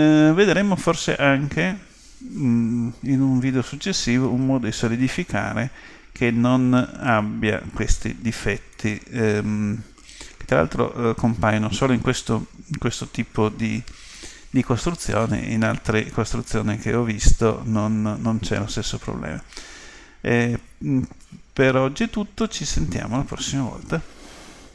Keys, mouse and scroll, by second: 4.0-5.9 middle drag, 8.8-10.7 middle drag, 15.7-17.7 middle drag.